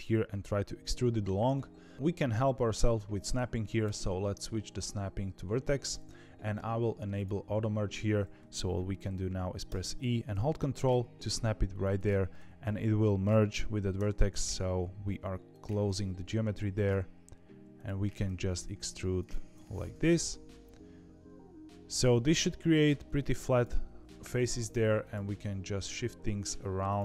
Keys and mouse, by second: 3.9-6.0 drag, 7.1 click, 9.6 e, 15.9 middle click, 16.5 e, 19.6-22.7 middle drag, 23.4 click, 24.0 g, 26.8 click.